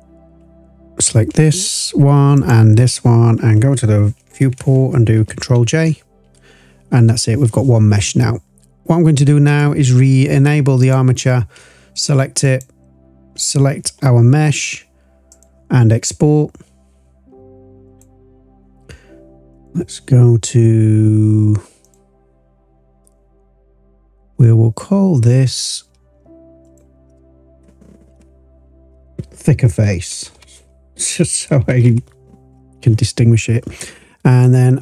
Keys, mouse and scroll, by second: 2.3 ctrl+click, 5.9 ctrl+j, 9.4 click, 10.7 click, 12.4 shift+click, 15.2-18.0 drag.